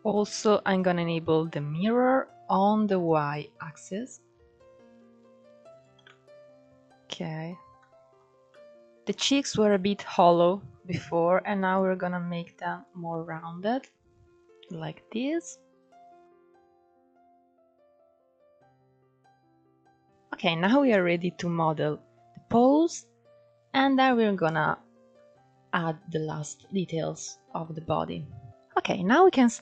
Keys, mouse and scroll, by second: 2.7 click, 3.9-5.7 drag, 5.7-7.2 middle drag, 7.2 scroll up 2, 7.5 middle click, 8.0 scroll down 1, 8.2-10.8 middle drag, 10.8-12.7 drag, 12.7 scroll down 1, 12.8-15.8 middle drag, 16.2 scroll down 1, 16.3-17.8 middle drag, 18.3-18.9 drag, 18.9 scroll up 2, 19.2 shift+middle drag, 19.5 scroll down 2, 19.6-20.7 middle drag, 20.7-22.4 scroll up 2, 22.4 scroll up 1, 22.7-23.6 scroll down 2, 23.6-24.1 scroll up 3, 24.1-24.8 scroll down 3, 24.8-25.6 middle drag, 25.6-26.2 scroll down 2, 26.2 KP_1, 26.8-28.5 scroll up 7, 27.3-27.6 shift+middle drag, 28.5-29.1 scroll up 1, 29.1-29.6 scroll down 2.